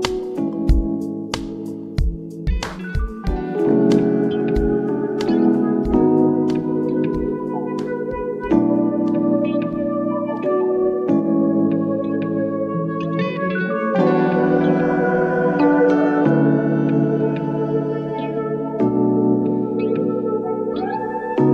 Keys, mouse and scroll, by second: 2.5 click, 5.2-7.9 drag, 7.9 v, 8.0 Down, 8.7 Down, 9.6 ctrl+j, 10.0 v, 10.3 shift+Right, 14.0 shift+Right, 16.9 click, 18.7-20.3 typing, 20.3 Escape.